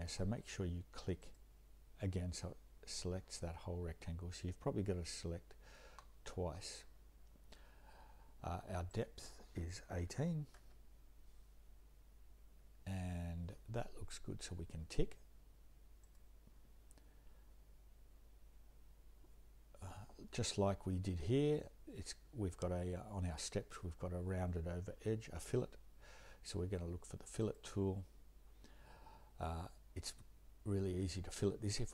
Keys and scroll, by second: 9.8-10.6 typing.